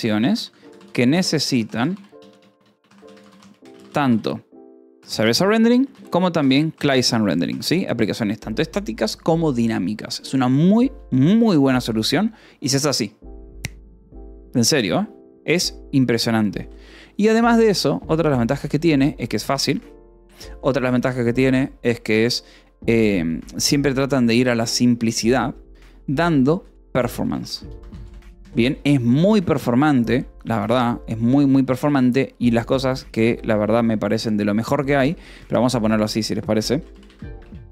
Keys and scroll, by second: 0.0-6.9 typing, 7.1 Escape, 8.0 ctrl+s, 16.5 :, 17.3 BackSpace, 19.3 i, 20.0 l, 20.1 Escape, 20.5 o, 26.3-29.0 typing, 29.7 ctrl+s, 31.6 o, 33.0 Escape, 33.0-34.8 typing, 35.0 Return, 35.2 Escape, 35.9-37.7 typing.